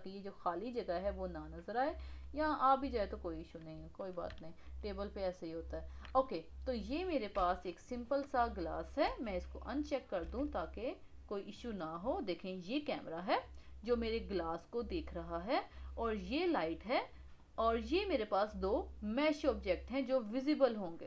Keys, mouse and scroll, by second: 2.0-7.4 middle drag, 7.4 n, 9.0 n, 9.8 click, 10.2 n, 10.6-11.5 middle drag, 11.5-12.1 scroll down 6, 12.1-13.4 middle drag, 13.4 scroll up 1, 13.8-15.4 middle drag, 15.4 scroll down 3, 15.8-18.4 middle drag, 18.4 click, 19.0 click, 19.4 click, 19.9 click, 20.2 click, 20.7 click.